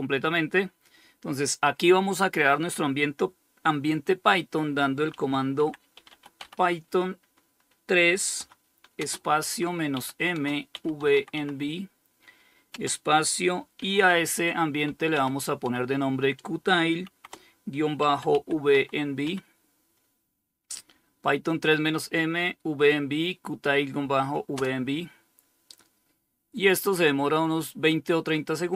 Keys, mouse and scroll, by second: 4.1-6.1 typing, 7.6-11.9 typing, 13.0-18.5 typing, 23.8 Return.